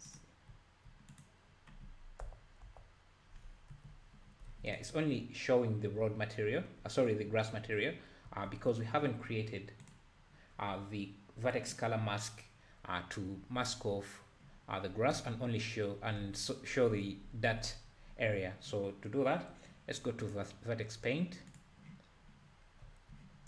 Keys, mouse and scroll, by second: 0.1 click, 0.5 `, 1.1 click, 2.2 KP_Divide, 2.7 KP_Divide, 3.8 alt+h, 4.5 alt+a, 4.7 click, 6.5-7.5 scroll up 7, 7.5-8.3 scroll down 7, 8.3 `, 8.6-9.5 scroll up 2, 11.8 click, 21.6-22.8 drag, 22.8 `.